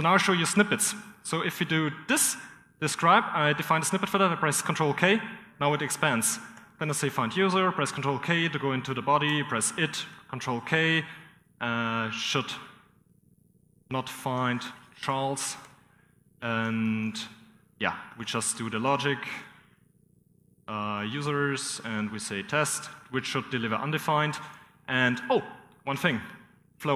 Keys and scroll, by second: 0.0-0.4 typing, 3.6-6.8 typing, 6.8 ctrl+k, 8.0-9.6 typing, 10.9-11.9 typing, 12.1 ctrl+[, 14.6-17.5 typing, 19.3-21.7 typing, 22.8 typing, 22.9 Return, 23.4 Return, 26.6 ctrl+[.